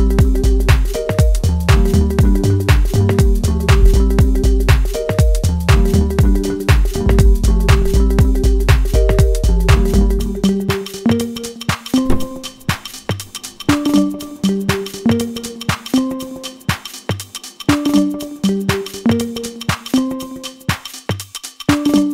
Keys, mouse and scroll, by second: 2.5-2.9 scroll up 1, 2.9-4.8 middle drag, 4.8-5.3 scroll up 1, 5.3-9.3 middle drag, 9.3-9.6 scroll down 1, 9.6-11.9 middle drag, 11.9 ctrl+alt+q, 13.3-15.3 shift+middle drag, 15.3 click, 19.1 click.